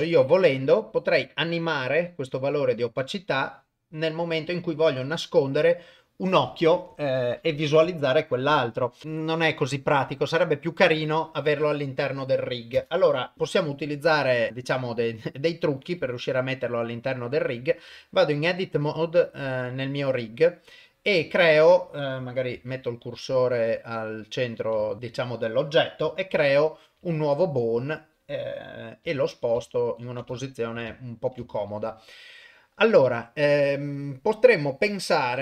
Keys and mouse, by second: 2.6-4.3 drag, 12.7 shift+space, 13.3 shift+Left, 14.5 ctrl+Tab, 15.8 click, 16.2 shift+middle drag, 17.6 Tab, 18.0 shift+middle click, 19.1 shift+middle click, 22.5 shift+s, 24.9 ctrl+middle click, 26.3 shift+a, 27.6 click, 29.0 g, 30.4 shift+middle click, 30.9 ctrl+middle click, 31.5 shift+middle click.